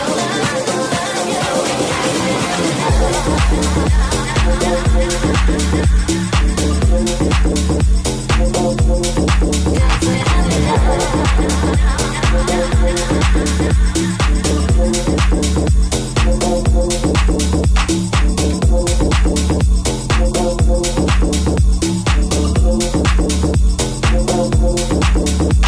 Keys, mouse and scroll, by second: 1.2 right click, 2.6 g, 3.4 alt+right click, 4.6 alt+z, 4.8 c, 5.8 alt+z, 6.3 g, 7.9 right click, 7.9-19.3 middle drag, 9.4 g, 10.6 Tab, 11.7 /, 19.7-22.2 shift+middle drag, 22.2 right click, 22.4-25.6 ctrl+middle drag, 25.5 right click.